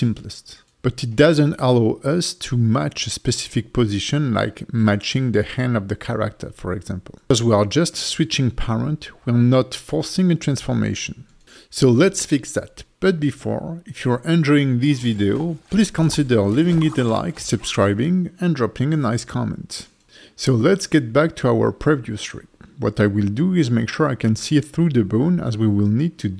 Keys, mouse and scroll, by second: 20.8 click, 21.8 click, 24.9 click.